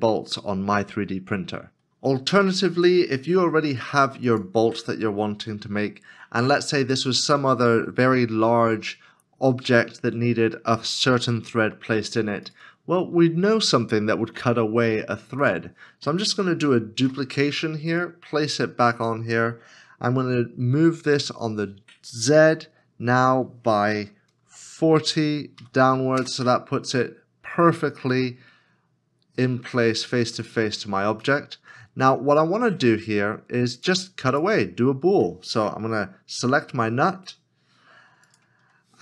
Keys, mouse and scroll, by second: 16.3-16.9 scroll, 16.9 shift+d, 17.9 right click, 21.4 g, 22.4 z, 24.6-25.5 typing, 26.2 Return, 27.4 scroll up 1, 28.2 middle click, 30.7 scroll down 1, 31.4 scroll down 1, 31.5 middle click, 33.0 scroll up 1, 38.4 shift+click.